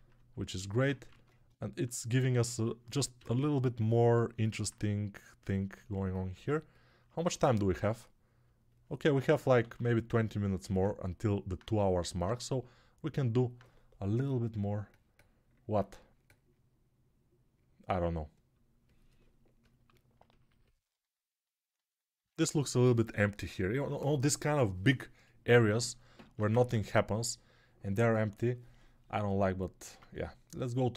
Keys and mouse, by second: 0.9 ctrl+Tab, 3.0-4.2 drag, 3.0-4.2 middle drag, 3.0-4.2 right drag, 3.0 g, 9.6 alt+q, 26.4 ctrl+Tab, 29.7 ctrl+Tab, 30.5 right click.